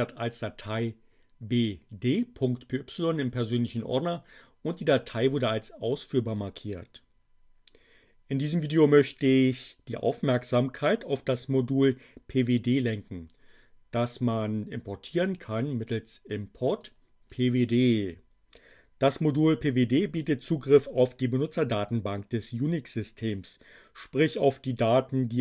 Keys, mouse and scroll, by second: 15.8 click, 17.3 click.